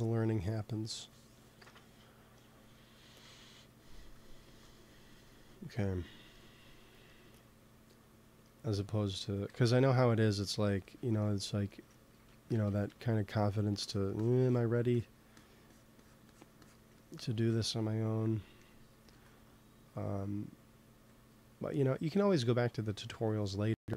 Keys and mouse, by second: 3.2 g, 3.9-5.6 drag, 4.3 ctrl+s, 9.6 KP_3, 12.0 c, 12.8 f, 13.8-18.5 drag, 16.8 middle click, 17.6 middle click, 19.0 ctrl+s.